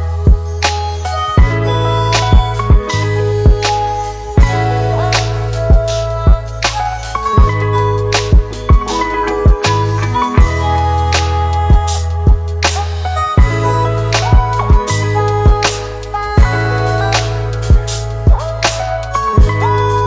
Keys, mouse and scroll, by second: 0.9 double click, 5.2 ctrl+-, 5.4 ctrl+-, 12.7 double click, 19.0-20.0 scroll up 1.